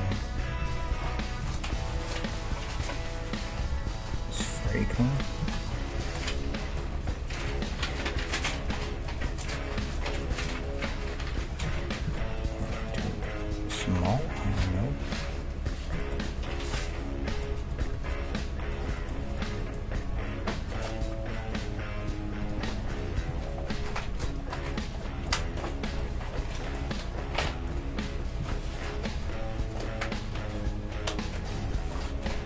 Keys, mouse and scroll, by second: 0.4 a, 0.6 a, 1.4 s, 5.0-8.5 middle drag, 5.4 ctrl+z, 7.5 s, 8.8 middle click, 9.8 Tab, 10.4 g, 11.7 ctrl+z, 12.1 ctrl+z, 12.4 middle click, 12.9-14.6 right drag, 13.4 s, 14.9 middle click, 16.0-17.9 middle drag, 17.7-21.1 right drag, 18.0 Tab, 19.8 g, 21.1 middle click, 22.9-24.7 right drag, 23.3 g, 24.7-28.0 middle drag, 25.4 Tab, 27.7 Tab, 28.0-30.2 right drag, 28.7 middle click, 29.2 s, 30.2 middle click, 31.8-32.4 middle drag.